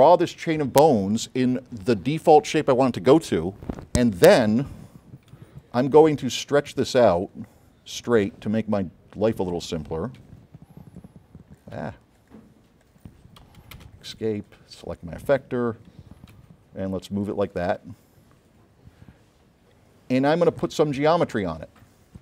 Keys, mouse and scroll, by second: 5.6 m, 6.8 space, 7.2 click, 10.3 v, 12.9 click, 13.5 Escape, 13.9 space, 14.4 click, 16.5 v, 17.3-17.9 drag, 21.9 click.